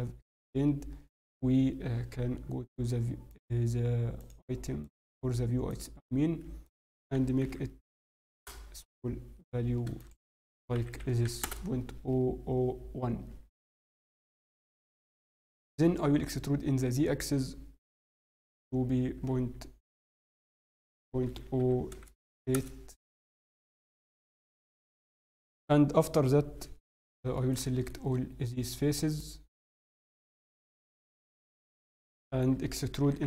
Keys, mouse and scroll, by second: 2.2 n, 3.3 click, 4.2 click, 4.8 click, 5.7 click, 6.6-8.6 click, 7.9 0, 11.1 0, 13.8 n, 14.4-14.8 scroll, 15.4 scroll down 3, 15.5 e, 23.2-23.6 scroll, 23.6 shift+middle click, 23.6 scroll down 5, 24.8 shift+middle click, 27.4 shift+middle click, 27.6 middle click, 27.9 scroll, 28.6 click, 28.6 scroll up 3, 29.1 shift+middle click, 29.8 shift+middle click, 31.2 shift+middle click, 31.6 middle click, 33.0 e.